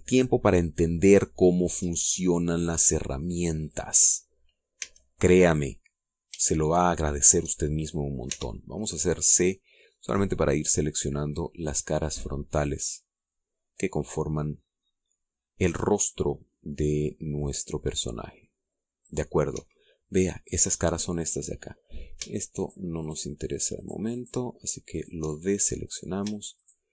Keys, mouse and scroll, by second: 4.5 click, 5.6 a, 6.1 middle click, 6.9 scroll down 2, 7.3-8.3 shift+middle drag, 9.1 c, 9.5-10.1 scroll down 4, 10.6-20.1 drag, 20.1 middle click, 20.4 Escape, 22.0 middle click, 23.4 shift+right click, 23.9 shift+right click, 24.6 shift+right click, 25.0 shift+right click, 25.8 shift+right click, 26.2 shift+middle click.